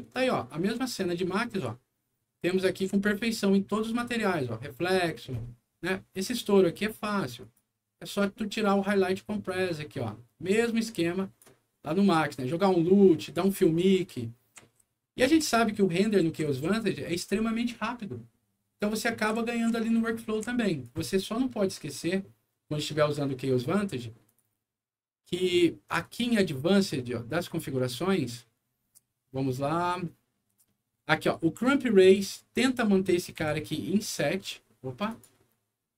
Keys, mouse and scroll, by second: 1.6 d, 2.5 s, 7.4 click, 8.5-11.4 drag, 12.1-13.3 drag, 13.6-16.9 right drag, 13.8 w, 14.1 a, 14.8 s, 19.1-20.8 right drag, 19.3 d, 20.4 w, 24.2 click, 26.0 click, 29.5 scroll down 1, 32.0 click, 32.2 click, 33.4 KP_7, 35.1 click.